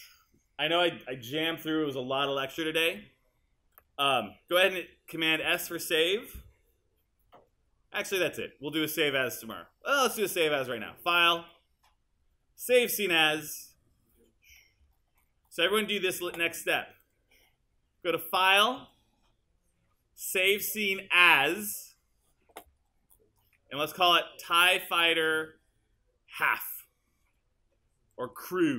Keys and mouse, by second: 5.4 super+s, 17.2-21.9 drag.